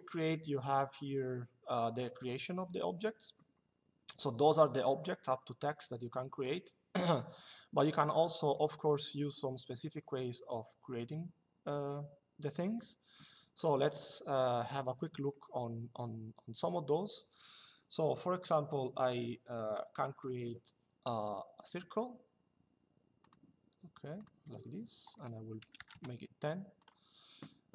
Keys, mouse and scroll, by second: 13.3 click, 19.6 click, 22.9 click, 25.3 KP_1, 25.5 KP_0, 25.6 KP_Enter, 26.5 click.